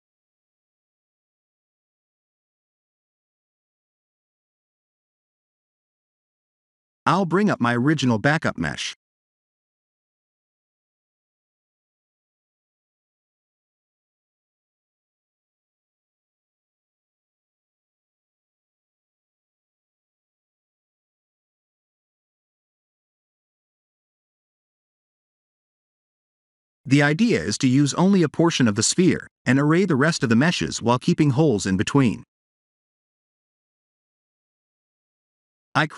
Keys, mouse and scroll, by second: 3.0 click, 3.6 middle click, 10.0 click, 13.9 click, 14.8 click, 16.1 click, 16.6 h, 17.4 click, 18.2 KP_Decimal, 19.0 middle click, 22.1 click, 23.0 middle click, 32.4 h, 33.3 shift+a, 35.7 Tab.